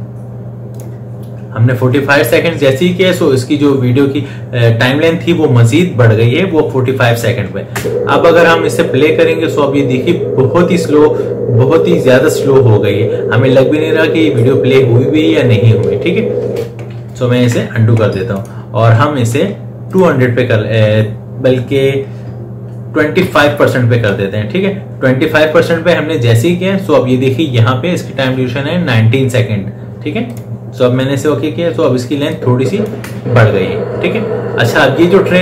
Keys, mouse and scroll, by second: 0.6 click, 7.5 space, 8.0 space, 16.3 space, 17.2 ctrl+z, 18.2 right click, 19.7 click, 30.1 click, 33.1 space.